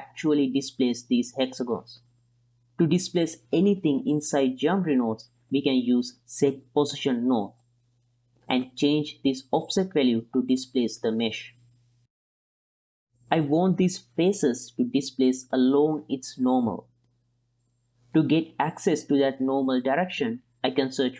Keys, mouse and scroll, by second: 0.1 middle drag, 0.4 click, 1.2 click, 1.6 ctrl+x, 1.8 click, 2.2 click, 2.6 click, 3.0 click, 5.4 click, 5.8 x, 6.1 click, 6.6 shift+a, 9.6-10.3 drag, 10.6 click, 11.4 click, 12.3 click, 13.9-14.3 middle drag, 15.3-15.9 middle drag, 16.1 middle click, 17.6 middle drag, 18.9 click, 20.3 shift+a.